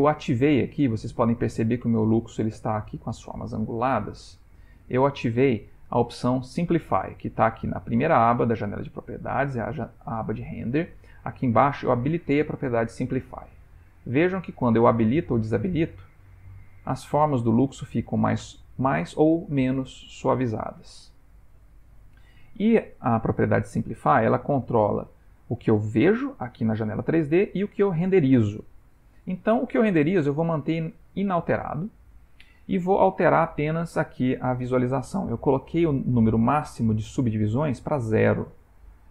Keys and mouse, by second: 0.6 ctrl+middle click, 4.8 click, 12.2 click, 13.4 click, 14.3 click, 15.2 click, 16.0 click, 16.7 click, 17.4 click, 22.0 click, 31.3 click.